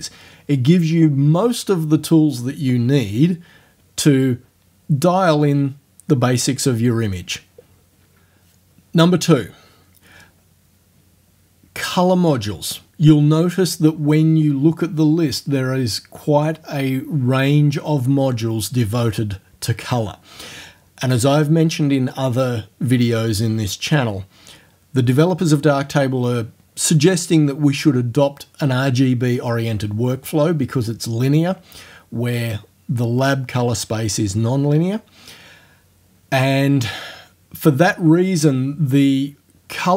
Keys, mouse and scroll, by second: 15.0 scroll down 2.